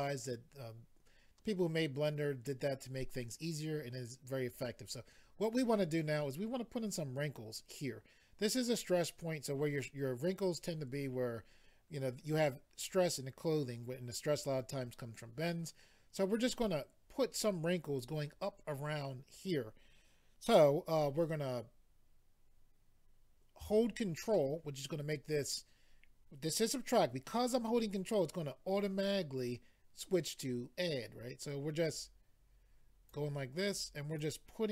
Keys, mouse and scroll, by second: 31.9 ctrl+click, 33.7 ctrl+click.